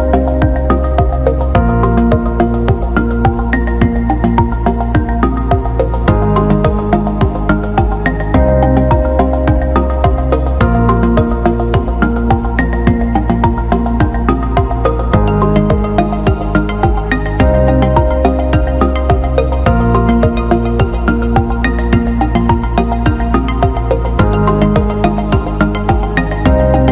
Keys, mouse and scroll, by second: 1.1 click, 1.6 click, 3.1 shift+d, 4.4 s, 6.6 alt+middle click, 7.0 alt+shift+middle click, 7.5 ctrl+alt+middle click, 8.0 alt+shift+middle click, 9.0 s, 11.8 click, 12.2-13.3 alt+middle drag, 15.0-16.8 drag, 19.1 click, 19.8 ctrl+s, 20.6 middle click, 22.3 click, 23.4 click, 24.6 click, 25.6 click, 25.9-26.9 drag.